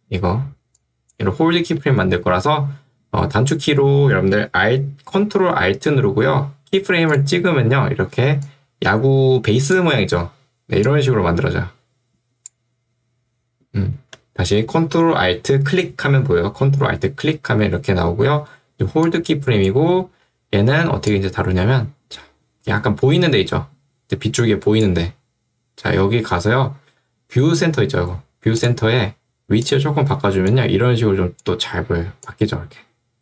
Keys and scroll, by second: 1.7 Escape, 8.3 ctrl+2, 14.0 Escape.